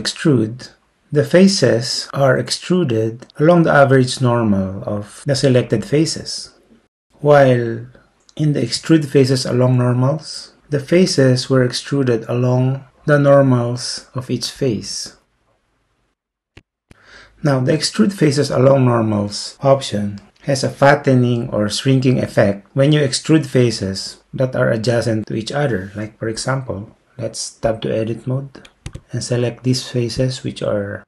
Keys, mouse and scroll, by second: 12.2-14.9 middle drag, 15.0 middle click, 15.4 middle click, 15.6 middle click, 28.9 Tab.